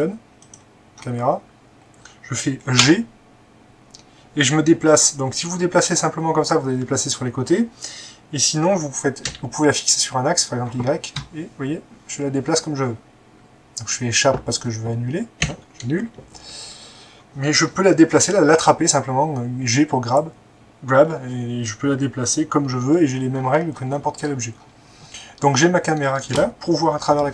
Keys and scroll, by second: 2.8 g, 9.3 y, 15.5 Escape.